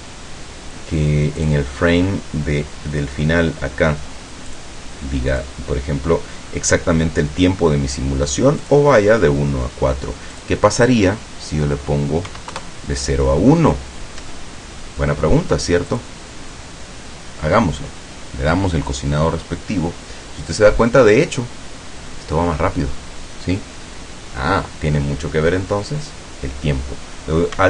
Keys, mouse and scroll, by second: 1.5 click, 4.7 click, 5.5 click, 8.7 click, 10.5 click, 12.4 KP_1, 12.6 KP_Enter, 14.3 Escape, 16.0 click.